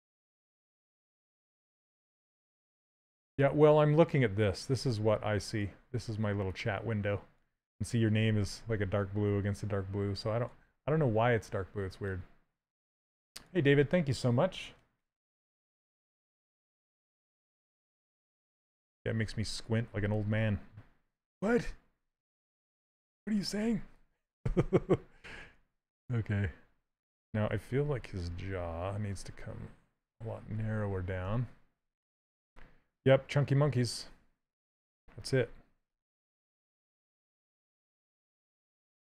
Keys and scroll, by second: 28.8 s, 30.9 s.